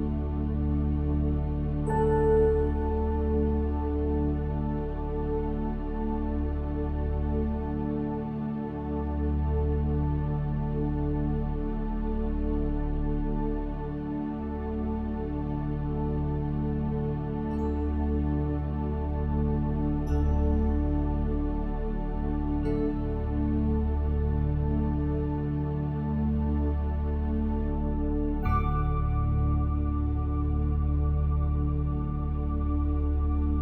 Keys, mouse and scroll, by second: 0.3 s, 1.4 click, 2.0 middle click, 2.5 click, 2.8 ctrl+b, 4.2 middle click, 5.2 scroll up 1, 5.4 middle click, 5.8 ctrl+KP_Add, 6.3 shift+d, 7.6 r, 8.3 s, 10.0 middle click, 12.4 z, 14.2 Tab, 14.7 z, 15.2 click, 15.5 Tab, 15.8 click, 16.4 click, 16.9 ctrl+KP_Add, 17.6 ctrl+KP_Subtract, 17.9 x, 18.8 ctrl+z, 18.9 ctrl+KP_Add, 19.2 x, 19.8 ctrl+z, 20.0 x, 21.2 click, 21.5 ctrl+KP_Add, 21.8 l, 22.4 middle click, 23.1 g, 24.1 middle click, 25.3 click, 25.7 f, 25.9 middle click, 26.5 click, 27.1 ctrl+b, 28.3 click, 28.8 l, 28.9 middle click, 29.7 middle click, 30.7 KP_1, 31.4 click, 32.3 s.